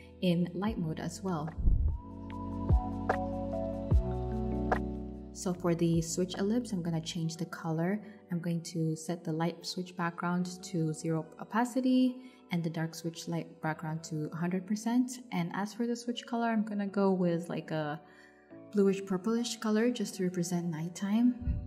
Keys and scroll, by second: 7.0 0, 8.5 0, 9.3 0.